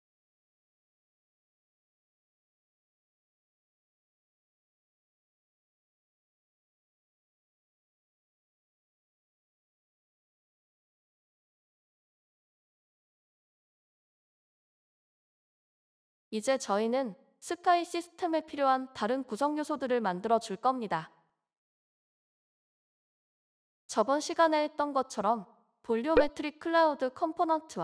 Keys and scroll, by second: 18.3 ctrl+c, 18.8 Return, 19.1 ctrl+v, 21.7 Return.